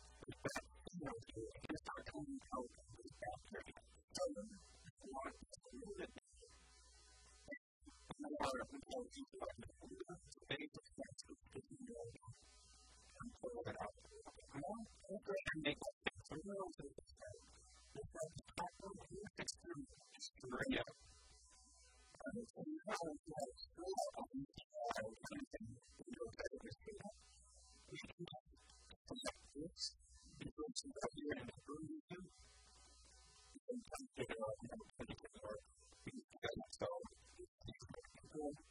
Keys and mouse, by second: 4.3 middle click, 4.9 KP_1, 5.1 KP_3, 6.5-7.5 shift+drag, 8.5 a, 8.9 b, 9.9-11.1 drag, 10.7 a, 10.7 b, 11.7-13.4 drag, 12.5 a, 12.5 b, 13.5 click, 18.3 KP_1, 18.8 KP_3, 19.1 e, 21.0 click, 23.3 middle click, 23.7 middle click, 23.9 middle click, 24.6 KP_1, 24.9 KP_3, 25.2 KP_1, 27.7 a, 28.4-30.3 drag, 29.4 middle click, 29.4 right click, 31.3-33.0 drag, 31.3 right click, 33.2 KP_1, 33.4 KP_3, 34.3-36.1 middle drag, 35.5 s, 36.7 a, 37.9 s.